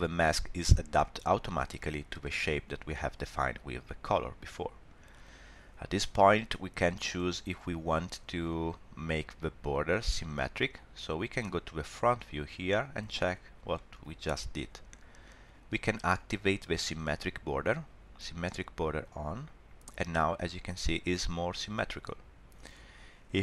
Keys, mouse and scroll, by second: 2.2 middle click, 7.2 scroll down 1, 12.3 click, 13.4 scroll up 1, 13.7 shift+middle click, 19.0 click.